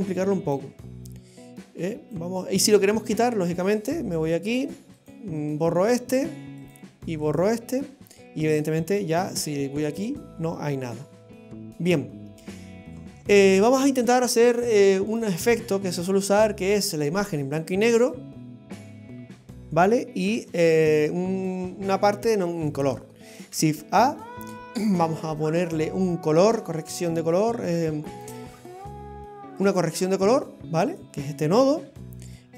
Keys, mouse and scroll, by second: 1.1 click, 3.1 click, 4.5 click, 6.6 click, 10.0 click, 12.0 click, 14.5 click, 18.1 click, 23.4 shift+a, 32.4 click.